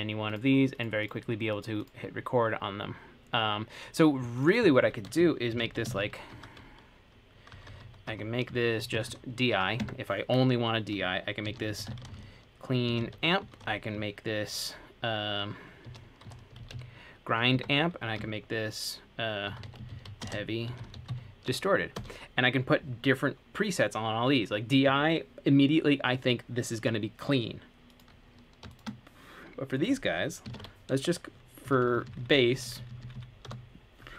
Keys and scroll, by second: 5.4-9.5 typing, 10.0 Tab, 11.4-13.8 typing, 15.8-17.4 typing, 17.7 Tab, 19.4-22.6 typing, 30.6-34.1 typing.